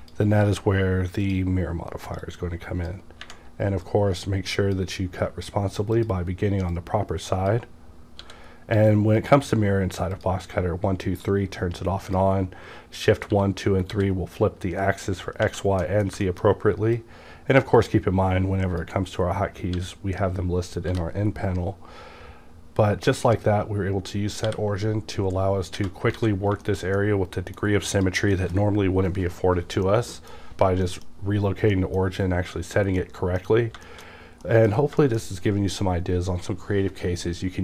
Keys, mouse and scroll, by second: 0.0 ctrl+z, 0.0 click, 1.2-10.1 drag, 8.2 w, 10.0 w, 11.3-15.4 drag, 13.3 w, 13.9 w, 15.9 middle click, 16.5 shift+middle click, 17.0-20.9 drag, 19.8 w, 20.9 b, 21.3 scroll down 1, 24.5 t, 26.2 alt+a, 26.4 scroll down 2, 26.7-27.9 shift+middle drag, 27.9 click, 28.0 click, 29.9 middle click, 31.0-31.3 scroll down 1, 31.7 middle click, 32.7-33.0 scroll down 1, 33.0 middle click, 34.1 scroll down 1, 34.5 middle click, 35.0 shift+middle click, 35.2 shift+scroll down 1.